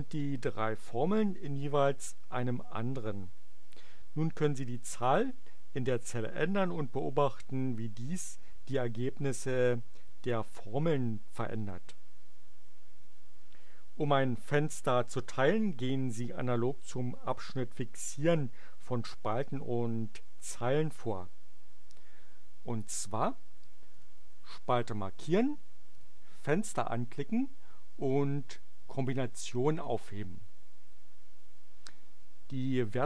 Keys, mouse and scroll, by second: 23.8 click, 25.9 click, 29.8 click.